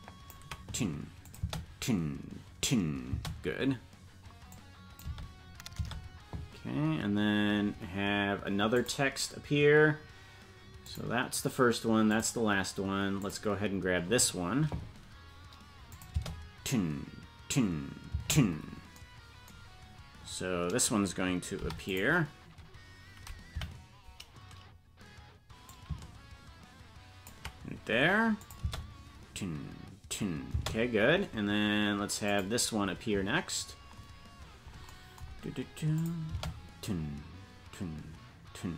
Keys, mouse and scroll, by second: 1.2 click, 1.4 space, 4.5 click, 4.5 space, 5.1 space, 6.1 space, 8.7 click, 10.8 click, 12.1 click, 13.2 click, 15.9 click, 16.1 space, 21.6 i, 23.6 Right, 25.7-27.3 drag, 28.4 click, 28.6 space, 32.3 click, 35.4 scroll down 1, 36.0 click, 36.0 scroll down 3, 36.3 space.